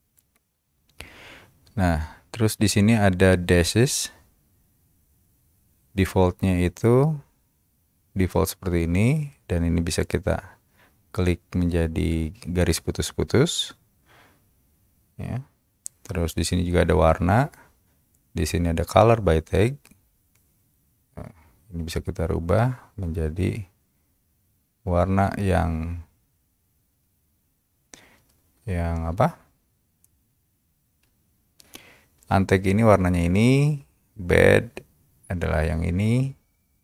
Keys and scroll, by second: 31.2 Escape.